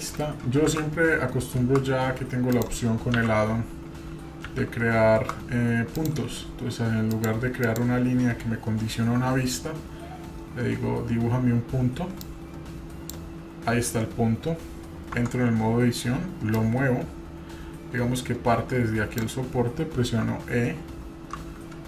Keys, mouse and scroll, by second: 0.7 shift+a, 4.4 shift+s, 7.6-13.1 drag, 15.1 Tab, 16.5-19.2 drag.